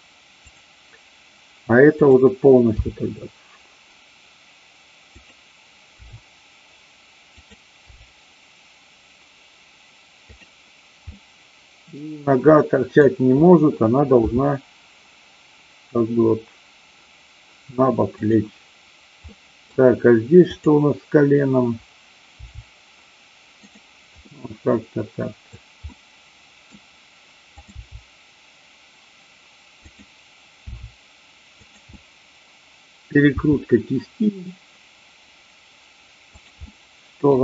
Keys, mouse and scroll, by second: 0.4 click, 2.1 click, 3.1 g, 5.2 click, 6.0 r, 7.4 click, 7.8 g, 10.4 click, 11.2 scroll up 1, 11.2-11.8 middle drag, 12.6-13.0 middle drag, 14.4 r, 18.2 click, 19.2-19.7 middle drag, 20.5-21.5 drag, 22.5 g, 24.2-25.1 scroll up 1, 25.1 middle click, 25.8-26.7 scroll up 1, 27.5 click, 28.5 g, 29.7 click, 30.6 r, 31.6 click, 31.8-33.1 middle drag, 36.7 middle click.